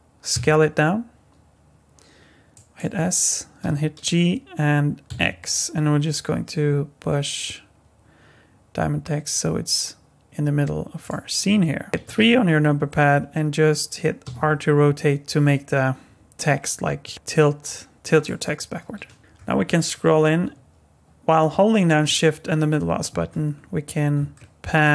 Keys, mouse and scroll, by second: 0.3 s, 3.6 g, 11.9 KP_3, 14.2 r, 19.1 scroll up 1, 19.2 middle click, 19.2 scroll down 5, 19.2 KP_3, 22.0 shift+middle click, 23.5-24.2 scroll up 3, 24.4 shift+middle click.